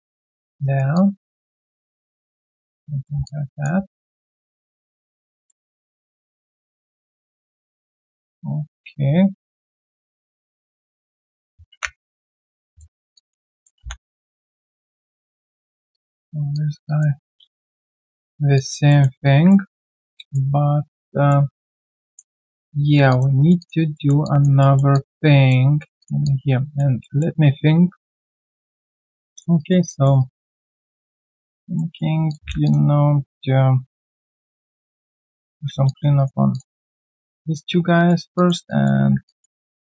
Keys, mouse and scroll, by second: 0.0 w, 0.1 alt+right click, 0.3 alt+click, 0.6 alt+right click, 0.9 alt+click, 1.6 middle click, 3.2 alt+click, 5.0 alt+middle click, 6.8 alt+click, 7.7 alt+middle click, 8.0 alt+click, 9.2 right click, 10.1 double click, 10.6 shift+click, 10.8 shift+double click, 11.9 ctrl+b, 13.1 alt+click, 13.5 alt+middle click, 15.1 right click, 15.9 double click, 16.5 shift+click, 18.2 shift+scroll down 1, 18.5 alt+click, 18.9 alt+middle click, 19.2 alt+click, 20.1 alt+click, 22.4 right click, 22.8 scroll down 1, 23.1 alt+click, 23.4 alt+right click, 23.6 alt+click, 23.9 alt+middle click, 24.2 alt+click, 24.6 alt+middle click, 24.9 alt+click, 25.6 alt+right click, 26.2 alt+click, 27.0 alt+middle click, 28.4 shift+Return, 29.3 alt+click, 29.5 alt+right click, 29.8 alt+click, 30.2 alt+right click, 30.4 alt+click, 31.3 alt+right click, 31.7 alt+middle click, 32.6 shift+click, 35.5 ctrl+1, 35.8 alt+click, 36.1 alt+right click, 36.8 alt+right click, 37.0 alt+click, 37.2 alt+middle click, 37.6 right click, 38.6 alt+click, 39.3 ctrl+click, 39.7 alt+middle click.